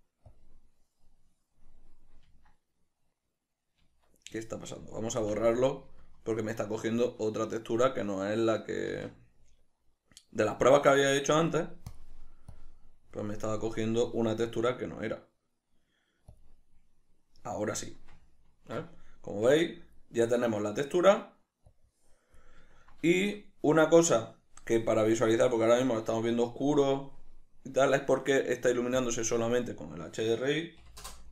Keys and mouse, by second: 2.6 Tab, 5.6 x, 9.3 shift+a, 12.4 click, 12.9-18.2 drag, 18.2-20.8 middle drag, 19.8 Tab, 22.1-23.1 drag, 23.1-29.3 ctrl+middle drag, 29.3 drag, 30.2-31.3 drag.